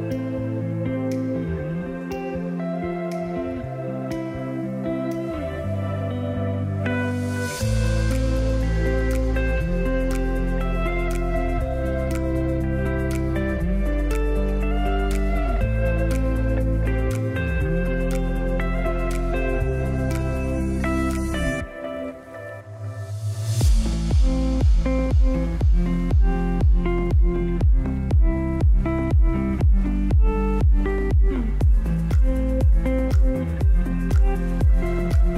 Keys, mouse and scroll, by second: 0.1 scroll up 1, 1.5-6.4 drag, 18.6 scroll down 1, 19.9 click, 27.4 right click, 28.3 click, 31.4-35.0 drag.